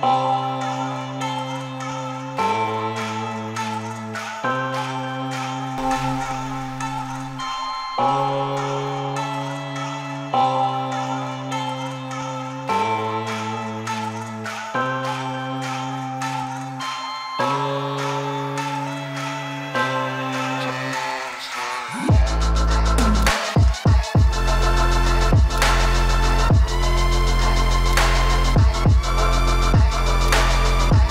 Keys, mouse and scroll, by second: 0.6 click, 2.6 click, 5.3 click, 7.4 click, 10.1 click, 15.5-15.8 scroll down 5, 16.4-16.9 scroll up 2, 17.4-18.6 scroll up 7, 18.6-19.7 scroll down 5, 23.0 click, 24.4-30.4 drag.